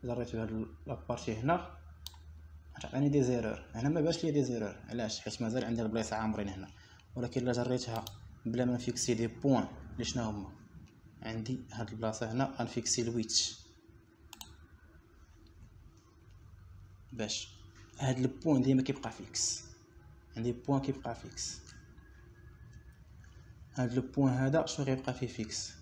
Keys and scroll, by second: 18.9 ;.